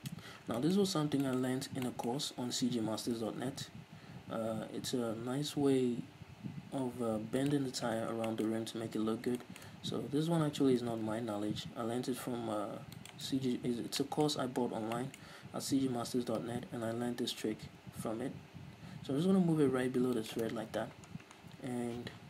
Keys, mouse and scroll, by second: 3.0 g, 7.7 shift+click, 7.9-8.5 scroll down 2, 8.5-13.3 shift+middle drag, 8.7-9.6 scroll up 2, 10.7 g, 13.3 shift+click, 13.5-16.3 scroll up 6, 14.2-20.5 shift+middle drag, 16.3 g, 20.5 shift+click, 20.8-22.2 scroll down 2, 22.2 z.